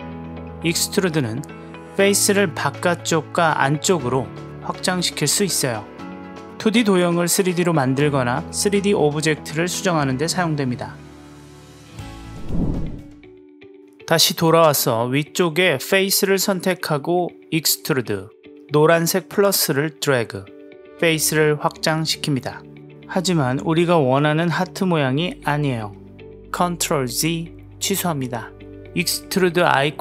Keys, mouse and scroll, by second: 0.4 click, 1.3 s, 2.2 click, 3.0-4.9 middle drag, 4.9 click, 5.5-6.4 drag, 6.8 click, 7.1 middle click, 8.1 click, 8.7 s, 9.7 click, 10.6-12.5 middle drag, 13.1-14.7 drag, 21.0-22.2 drag, 22.6 click, 23.2-24.3 middle drag, 24.3-26.3 drag, 27.0 ctrl+z, 28.9-30.0 drag.